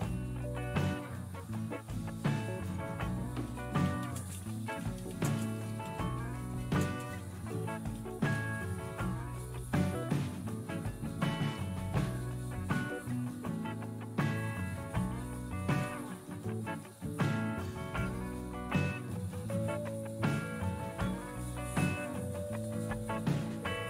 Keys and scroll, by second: 3.2-8.4 typing, 15.7 Return.